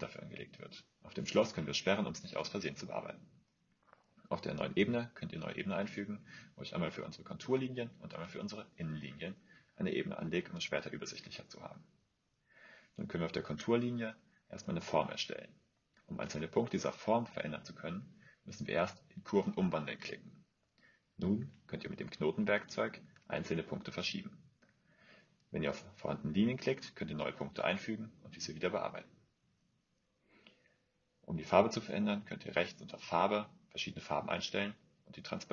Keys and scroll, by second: 2.5-4.2 typing, 3.8 Return, 6.1-8.0 typing, 22.8 typing.